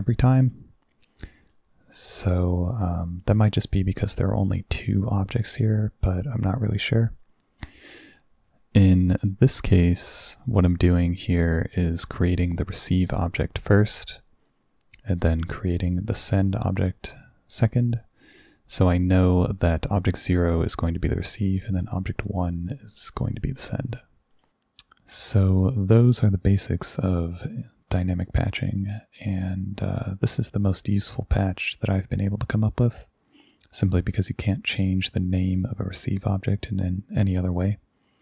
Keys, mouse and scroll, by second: 1.4 click, 2.0 click, 2.8 click, 3.4 click, 3.7 click, 10.3 click, 19.3 click, 19.7 click, 21.9 click, 24.4 click.